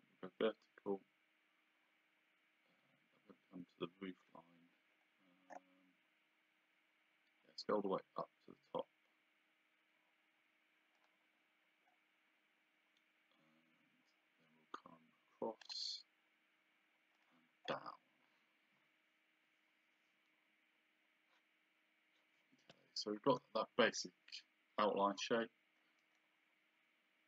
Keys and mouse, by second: 11.0 click, 15.6 click, 17.2 click, 23.2 Escape, 26.0 right click.